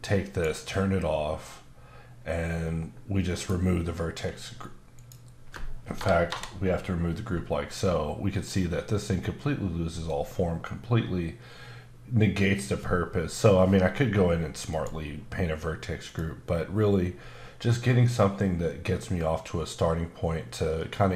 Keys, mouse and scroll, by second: 0.3 click, 3.4 click, 6.3 Return, 14.7 click, 18.5 click.